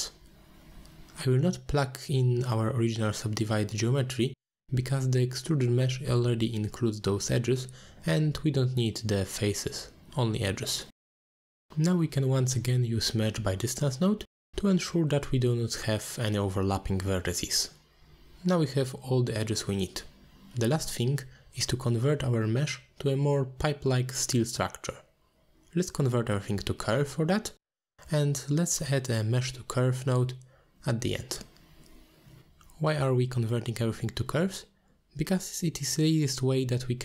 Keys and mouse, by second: 0.9-1.2 shift+middle drag, 1.5-3.7 middle drag, 4.2 shift+middle drag, 4.7 middle click, 5.8 middle click, 6.3 middle click, 6.9-8.4 drag, 8.9 shift+a, 12.5 click, 16.0 middle click, 16.5 ctrl+s, 17.0-18.2 drag, 20.6 middle click, 22.3 shift+a, 27.3 click, 28.9-30.9 middle drag.